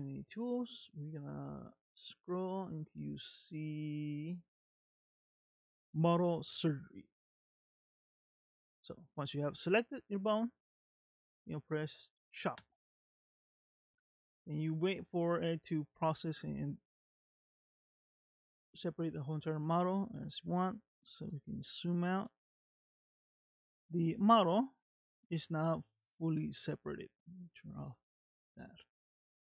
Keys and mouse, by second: 12.7-18.0 drag, 21.3 middle click, 22.3 g, 28.1 click, 28.9 g.